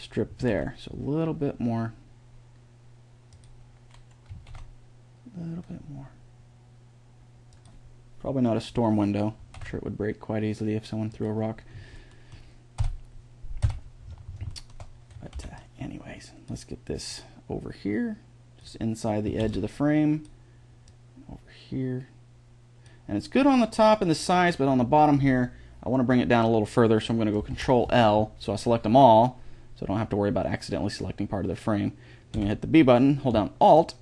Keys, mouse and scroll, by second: 0.1 s, 4.1 s, 9.2 s, 11.5 middle click, 12.6 KP_1, 12.6 KP_4, 13.5 KP_1, 15.0 a, 15.1 b, 16.9 click, 19.1 a, 19.2 b, 20.7-22.4 drag, 27.3 ctrl+l, 32.1 b.